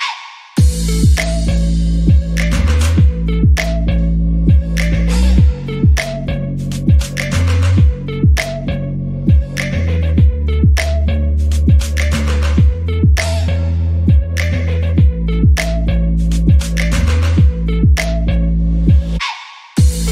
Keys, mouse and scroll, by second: 0.0-0.5 scroll down 9, 0.5 alt+z, 0.8 click, 1.4-2.0 scroll up 15, 2.0 shift+middle click, 2.6 e, 4.4 scroll down 1, 4.7 e, 6.2-6.9 scroll down 6, 6.9 Tab, 7.3-8.2 scroll down 2, 7.5 drag, 8.2 click, 8.4 scroll down 1, 8.6 shift+middle click, 8.8 scroll up 2, 9.1 click, 9.5 Tab, 9.7 scroll up 3, 9.9-11.3 shift+middle drag, 11.3-11.7 scroll down 1, 12.8 alt+z, 13.0 alt+z, 13.3-14.9 shift+middle drag, 15.0 click, 16.0 click, 16.9 x, 17.5-17.9 scroll up 2, 17.9 shift+middle click, 18.5-19.8 scroll down 2, 19.8 click.